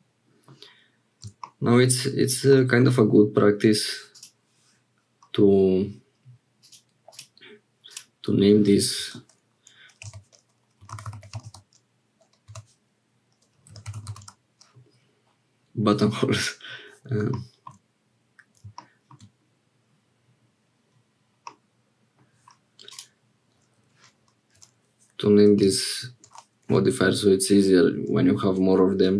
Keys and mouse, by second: 1.8 shift+click, 2.5 middle click, 4.1 click, 8.0-15.3 drag, 11.0 t, 21.6 middle click, 22.9-29.1 drag.